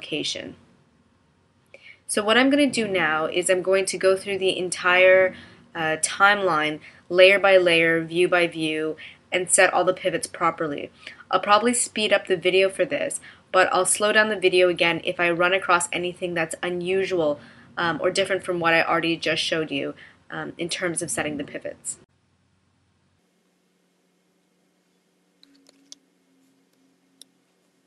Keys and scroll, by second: 25.8 super+c.